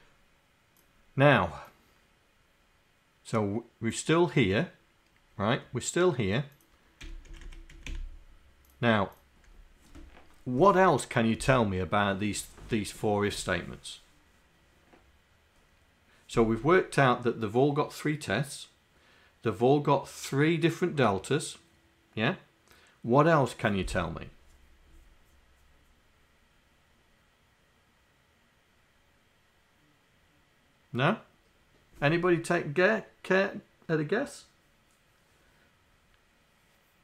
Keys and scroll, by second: 7.5 Down, 7.7 Left, 7.9 Delete.